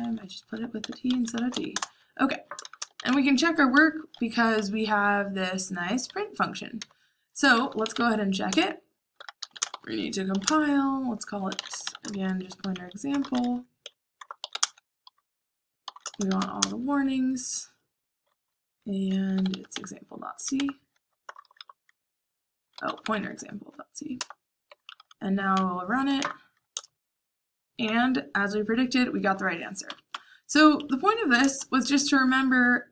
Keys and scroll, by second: 0.0-3.3 typing, 3.6 Escape, 4.5-13.1 typing, 8.4 Return, 14.5-16.9 typing, 19.0-23.3 typing, 24.1 Return, 24.4-26.4 typing, 26.7 Return, 29.8 Up, 30.7 Up, 31.4 Return, 32.0-32.9 typing.